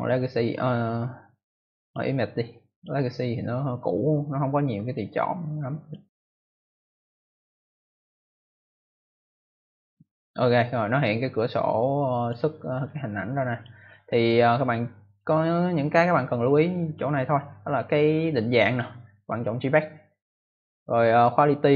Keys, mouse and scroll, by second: 1.7 click, 2.6 click, 5.7 click, 11.3 click, 12.8 click, 18.6 click, 19.5 click.